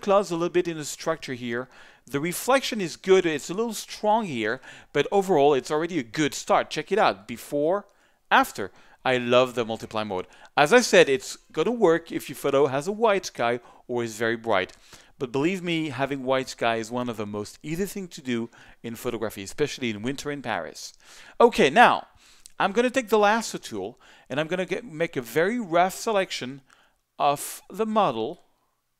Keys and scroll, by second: 2.3 z.